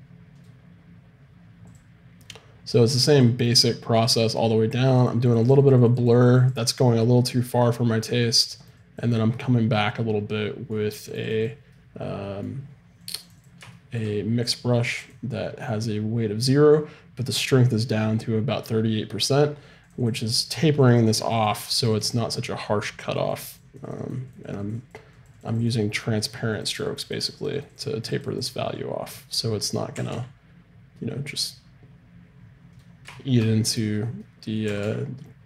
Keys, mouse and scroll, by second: 1.7-4.3 drag, 4.3 middle click, 5.0-16.6 drag, 19.9-23.9 drag, 27.2-30.1 drag, 30.0 r, 33.9-35.4 right drag, 34.7 r.